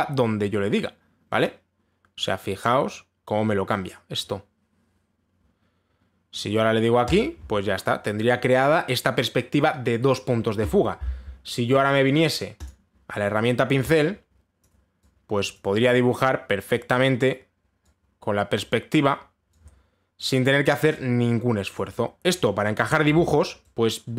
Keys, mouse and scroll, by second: 7.7 click, 13.3 click, 15.2 click, 16.2 click, 17.3 click, 19.2 click, 20.9 click, 22.4 click, 23.5 click, 23.8 ctrl+z.